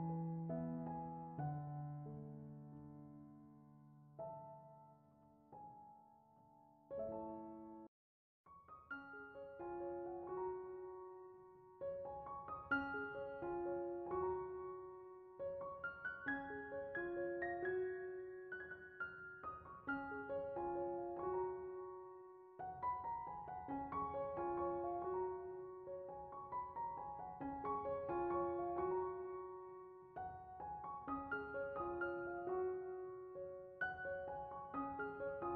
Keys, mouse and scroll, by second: 0.8 z, 0.9 right click, 1.4-1.9 middle drag, 1.9 click, 2.0 click, 2.5 click, 3.3 scroll down 6, 3.6 click, 4.1 click, 4.9 click, 6.9 x, 8.7-10.5 middle drag, 10.5 click, 11.0 ctrl+shift+t, 12.4 middle click, 13.4 click, 13.8 middle click, 14.8 click, 16.2 x, 16.7-19.4 scroll, 19.4-20.4 drag, 20.5-24.2 drag, 26.7-27.7 middle drag, 27.7 click, 28.4 click, 33.7-35.5 drag.